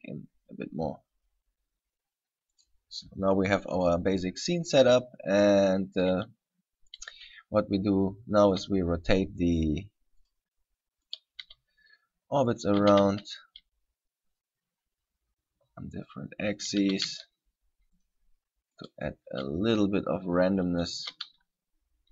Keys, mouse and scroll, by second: 2.8 click, 4.3 scroll up 1, 7.2 right click, 8.7 r, 10.5 click, 11.3 right click, 11.6 r, 12.8 click, 13.0 r, 16.2 click, 17.0 r, 18.2 click, 19.0 right click, 19.5 r, 21.1 click, 21.2 r.